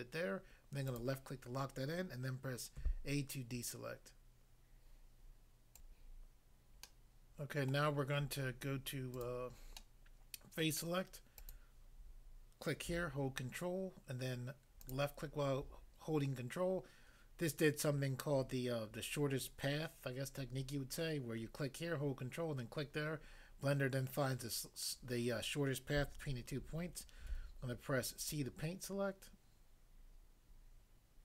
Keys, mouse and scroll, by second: 0.9 click, 1.0 click, 2.7 a, 5.7 click, 6.9 middle click, 7.7 middle click, 9.1 click, 9.2 click, 9.8 middle click, 10.7 middle click, 11.4 click, 14.9 ctrl+click, 27.3 c, 28.2 click.